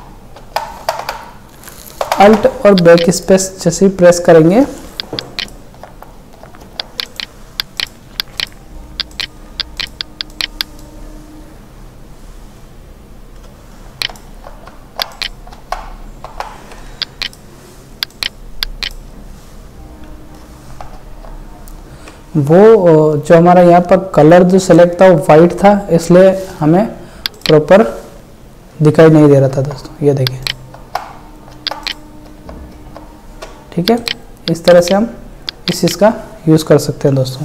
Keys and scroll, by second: 5.4 alt+BackSpace, 14.1 alt+BackSpace, 15.6 alt+BackSpace, 21.0 alt+BackSpace, 29.5 alt+BackSpace, 30.8 alt+BackSpace, 32.3 alt+BackSpace.